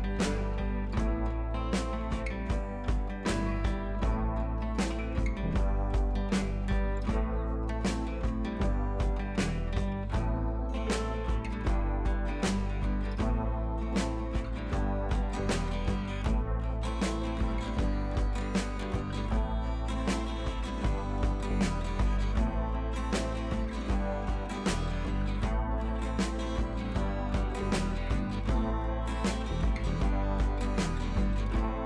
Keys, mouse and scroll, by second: 6.0-7.0 scroll down 1, 7.3-8.5 scroll down 1, 9.1 scroll down 1, 12.8-14.1 scroll down 1, 15.5-17.7 scroll down 1, 18.9-19.7 scroll down 1, 24.3 click, 25.8 ctrl+t, 26.4-27.6 alt+drag, 28.3 ctrl+z, 30.3-31.5 alt+drag.